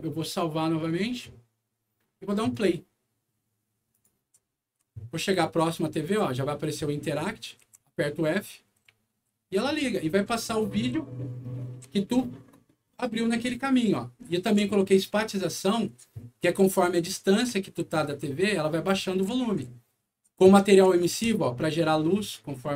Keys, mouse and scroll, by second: 0.8 click, 2.5 click, 3.9 click, 4.1-4.8 typing, 7.6 f, 8.8 s, 9.2 a, 14.4 d, 16.0 w, 19.6 d, 20.2 w, 21.2-22.7 right drag.